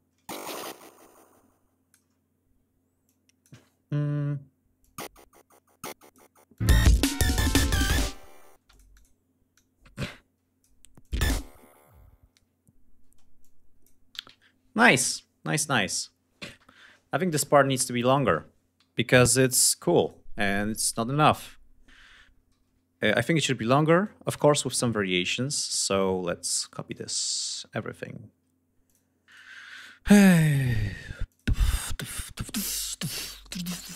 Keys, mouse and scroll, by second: 2.6 click, 3.4 ctrl+scroll up 2, 4.3-5.8 drag, 6.0 click, 6.2 space, 6.8 d, 8.1 space, 8.2 click, 9.0-10.3 drag, 10.5 click, 10.6 space, 11.6 ctrl+scroll down 2, 12.6 space, 12.9 click, 13.6 g, 13.8 ctrl+scroll down 2, 14.9 click, 15.7 scroll up 2, 16.8-17.1 scroll up 2, 18.3 g, 19.5 click, 20.0 ctrl+click, 20.5 ctrl+scroll down 2, 21.0-22.0 scroll up 4, 22.1 r, 23.5-25.4 drag, 26.0 ctrl+click, 26.4 ctrl+click, 26.9 ctrl+click, 27.2 ctrl+scroll down 2, 27.5 ctrl+scroll up 3, 28.4 ctrl+click, 28.8 ctrl+click, 29.2-29.9 ctrl+scroll down 4, 30.8 ctrl+click, 33.0 ctrl+click, 33.4 ctrl+scroll down 2.